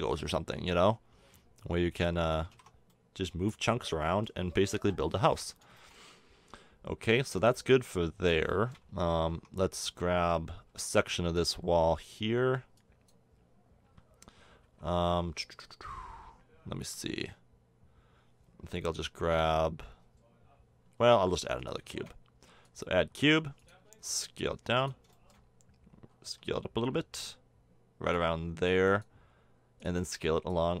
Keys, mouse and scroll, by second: 2.4 a, 2.5 Tab, 4.7 KP_7, 9.3 Tab, 10.7 b, 12.4 b, 14.6 a, 21.8 shift+a, 23.1 s, 23.8 s, 26.2 s, 29.1-30.8 drag.